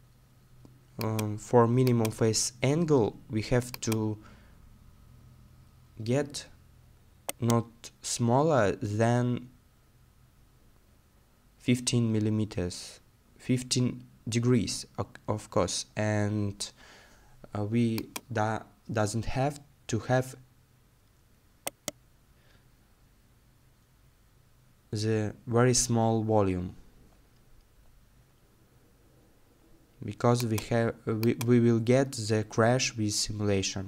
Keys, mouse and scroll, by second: 4.6-5.0 scroll down 1, 5.0-6.7 scroll up 1, 7.3 middle click, 7.8 right click, 10.9 middle click, 11.6-13.7 scroll down 1, 13.7 middle click, 14.8-17.0 scroll down 1, 18.6 middle click, 21.7 right click, 23.2 middle click.